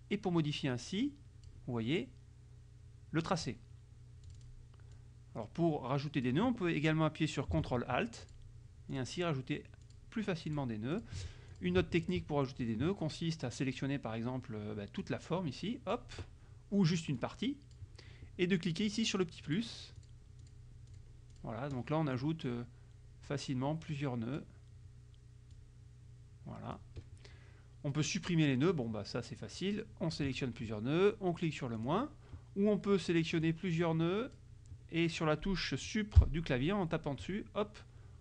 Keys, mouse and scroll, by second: 4.3 click, 5.0-6.5 drag, 8.3 ctrl+alt+click, 9.0 ctrl+alt+click, 9.9 ctrl+alt+click, 10.5 ctrl+alt+click, 11.0 ctrl+alt+click, 11.6 ctrl+alt+click, 12.3 ctrl+z, 15.1-16.2 drag, 17.0-18.0 drag, 19.5 click, 20.1 click, 20.5 click, 21.0 click, 21.4 click, 22.5-23.5 drag, 24.0 click, 25.6-27.0 drag, 28.8-30.4 drag, 31.8 click, 33.5-34.6 drag, 36.3 Delete.